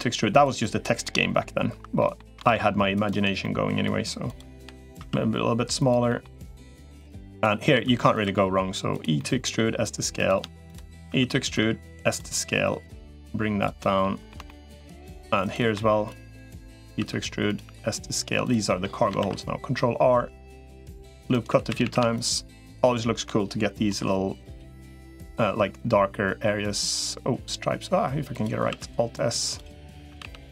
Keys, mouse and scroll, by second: 0.8 middle click, 1.6 2, 1.8 middle click, 2.2 ctrl+r, 3.2 middle click, 4.4 l, 4.8 s, 5.9 middle click, 6.4 middle click, 7.0 3, 7.6 e, 8.0 s, 9.0 middle click, 10.0 click, 11.0 e, 11.4 s, 12.6 click, 13.6 middle click, 14.2 shift+middle click, 15.2 click, 15.8 shift+click, 16.8 e, 17.4 s, 18.5 middle click, 19.0 ctrl+r, 21.4 3, 21.6 a, 22.6 alt+shift+click, 23.8 i, 28.6 alt+s, 29.8 a, 30.0 g.